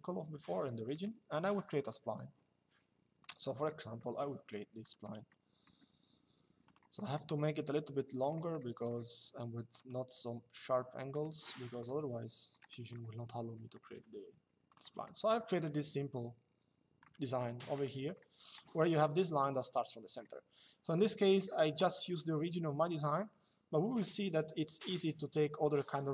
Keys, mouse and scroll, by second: 0.6 click, 2.9 click, 4.5 click, 6.4 click, 7.9 click, 8.3 middle click, 9.5 click, 10.9 click, 12.4 middle click, 13.0 Escape, 14.3 click, 15.3 middle click, 17.5 middle click, 20.6 middle click.